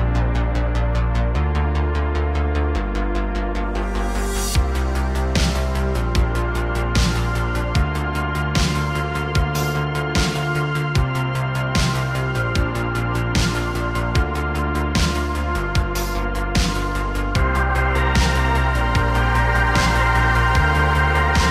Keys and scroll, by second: 6.8 i, 8.9 ctrl+c, 10.9 ctrl+shift+v, 13.2 ctrl+v, 15.0 space, 20.2 space.